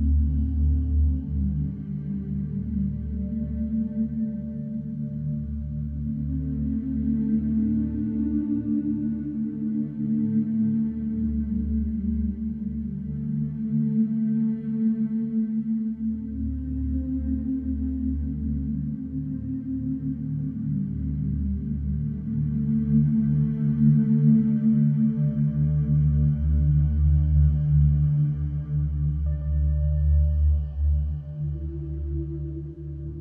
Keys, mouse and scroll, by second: 7.7 g, 13.2-17.3 drag.